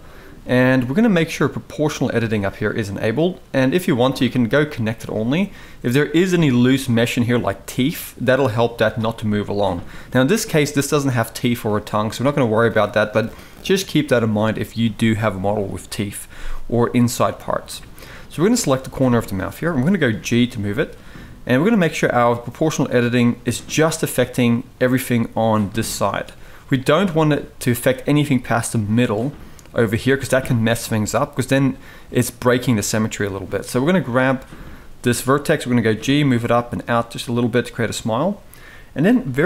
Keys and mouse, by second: 0.2 click, 1.7-4.7 drag, 13.1-14.2 drag, 17.2 shift+middle drag, 18.2 click, 19.4 shift+middle drag, 19.9 g, 28.6-29.4 drag, 34.5 shift+middle drag, 35.4 g.